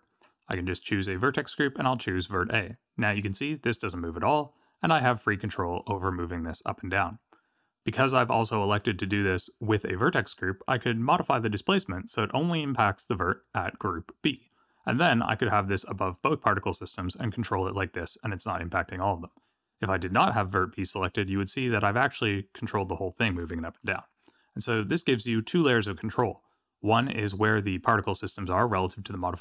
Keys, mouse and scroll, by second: 0.7 click, 4.7 click, 5.8 click, 11.1 click, 15.5 click, 16.8 click, 20.7 click, 22.0 click, 23.7 click.